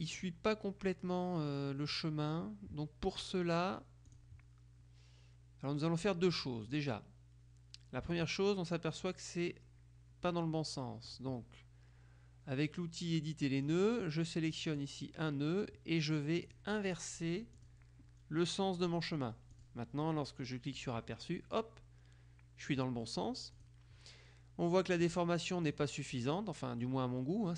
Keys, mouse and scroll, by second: 4.1 click, 6.7 click, 11.2 click, 13.9 click, 14.7 click, 16.6 click, 17.7 click, 19.7 click, 23.7 click, 25.8 click.